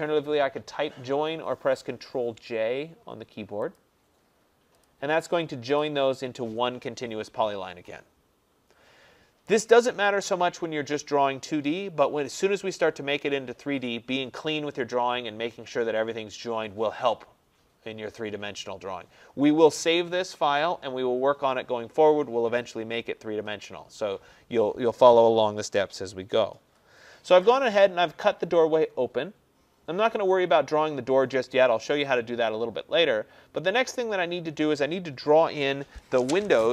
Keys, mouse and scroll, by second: 3.8 click, 4.9 click, 5.9 click, 9.0 middle click, 9.1-10.6 scroll, 10.6-11.4 scroll, 11.4-11.7 scroll, 25.7-26.9 scroll, 26.9-27.5 scroll, 27.6 click, 33.5 scroll, 33.8 middle click.